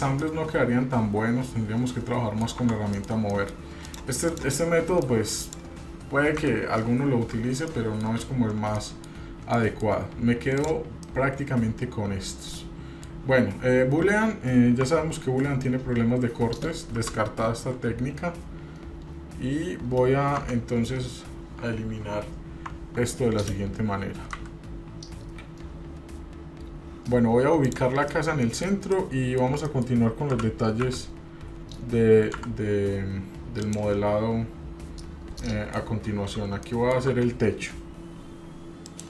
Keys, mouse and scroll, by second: 0.0 scroll down 2, 0.2-2.5 middle drag, 2.6 Tab, 2.9 middle click, 3.1 scroll down 1, 3.3 middle click, 3.8 click, 4.3 click, 5.1 click, 6.4 Delete, 7.5 shift+middle click, 8.2-8.8 scroll down 3, 8.8-9.1 middle drag, 9.2-9.5 scroll up 1, 9.6-9.9 shift+middle drag, 10.5 click, 11.0-13.1 middle drag, 13.4-13.8 scroll up 1, 14.8 Tab, 15.4-15.9 scroll up 1, 15.9-16.4 scroll down 1, 16.9 /, 22.7 Tab, 24.3 Delete, 27.6 click, 28.1 middle click, 28.9 shift+middle click, 29.4 shift+scroll down 1, 29.6 middle click, 30.3 g, 35.4-35.9 middle drag, 36.0-36.4 scroll up 1, 36.7 shift+middle drag.